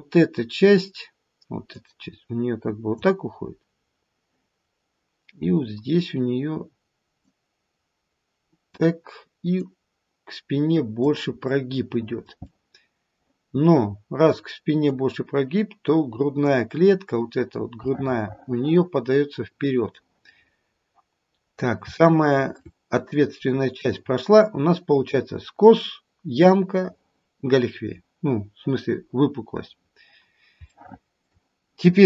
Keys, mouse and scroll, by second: 1.7 click, 3.7-4.6 scroll down 2, 4.6-6.9 scroll up 1, 7.2 click, 9.6 click, 12.0 middle click, 12.5 middle click, 14.9 click, 17.9 middle click, 18.2 middle click, 18.8 middle click, 20.4-21.8 scroll up 4, 22.4 shift+middle click, 23.4 scroll down 1, 29.8-30.2 scroll up 2, 30.2-30.5 scroll down 1, 30.7 shift+middle click, 31.1 shift+middle click.